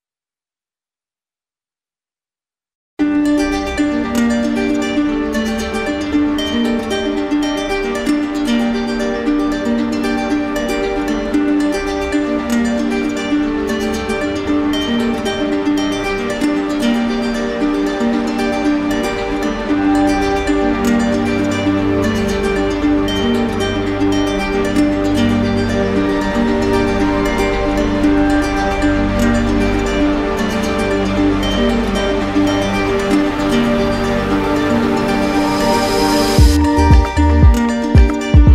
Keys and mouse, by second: 0.0 right click, 0.5-6.3 shift+drag, 6.5 click, 7.2 right click, 8.8 click, 10.2 click, 11.3 shift+click, 12.6 click, 13.8 click, 14.2 click, 15.2 click, 16.2 click, 17.1 right click, 17.8 alt+right click, 18.4 right click, 19.1 right click, 19.9 w, 21.1 right click, 21.8 alt+right click, 22.7 right click, 24.5 click, 25.2 right click, 27.8 right click, 32.7 q, 34.0 right click, 35.2 shift+click, 36.8 right click, 37.5 right click, 38.3 shift+right click.